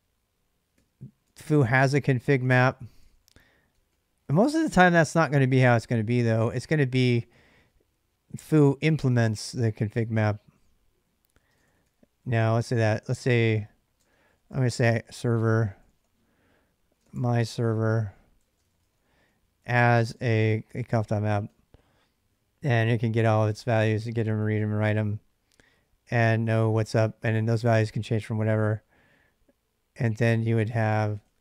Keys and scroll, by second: 0.5-1.8 typing, 2.7 ctrl+[, 2.8-7.3 typing, 11.1-24.8 typing, 26.2 j, 26.4 j, 26.7 j, 28.1 j, 30.3 o, 31.0 Return.